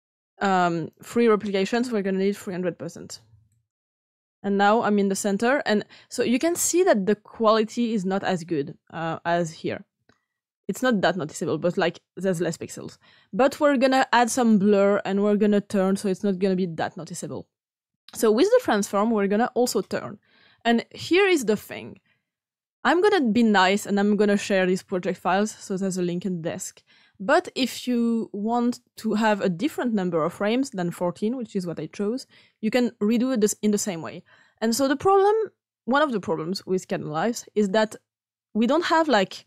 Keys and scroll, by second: 2.7 typing, 3.6 Return, 7.0 typing.